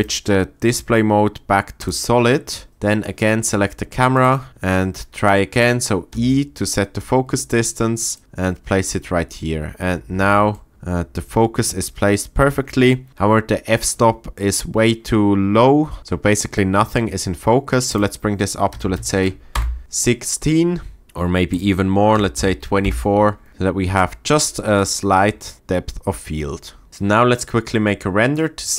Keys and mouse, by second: 0.1-2.2 drag, 4.1 click, 6.1 e, 8.1 click, 8.2 middle click, 9.6 middle click, 10.1-10.7 shift+middle drag, 17.9-19.5 drag, 19.8 middle click, 21.5 click.